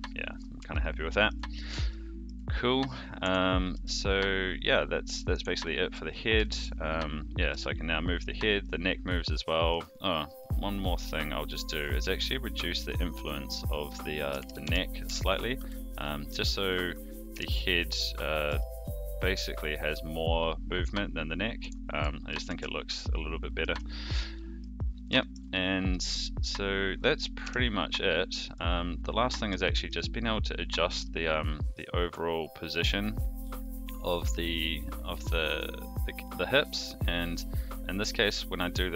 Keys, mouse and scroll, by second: 0.3 click, 0.7 shift+middle click, 1.9 shift+middle click, 3.2 Tab, 3.7 g, 5.6-6.1 middle drag, 6.4 shift+middle drag, 7.5 g, 8.6-10.5 middle drag, 10.7 click, 11.5-12.2 middle drag, 13.0 click, 13.4-15.5 drag, 15.9 middle click, 17.3 KP_3, 18.3 click, 18.4 g, 22.3 alt+g, 22.4 alt+r, 22.9-23.6 middle drag, 23.9 shift+middle click, 24.3 middle drag, 25.1 shift+middle drag, 25.5-25.9 middle drag, 27.4 KP_3, 28.5 click, 29.6 shift+middle drag, 30.9 g.